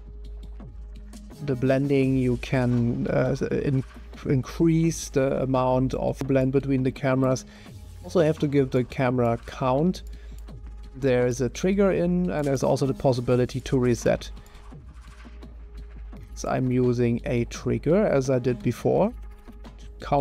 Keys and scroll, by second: 18.6-20.2 typing.